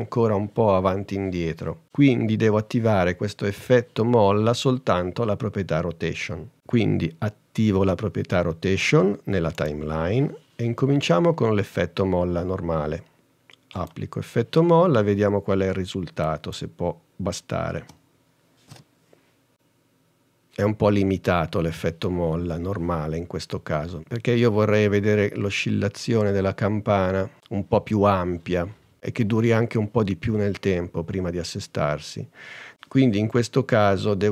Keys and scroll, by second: 17.9 space.